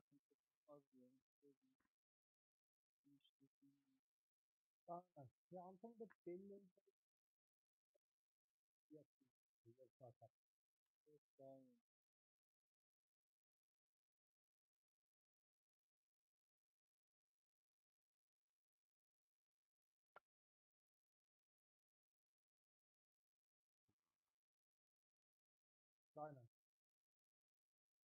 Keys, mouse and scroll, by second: 3.4-28.0 middle drag.